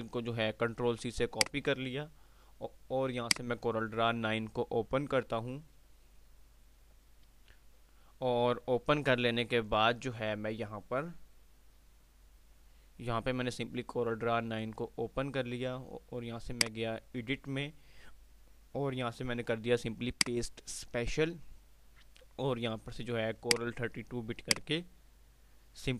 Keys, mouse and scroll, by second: 1.9 click, 3.6 click, 4.1 typing, 16.3 click, 16.3 typing, 20.2 click, 23.5 click.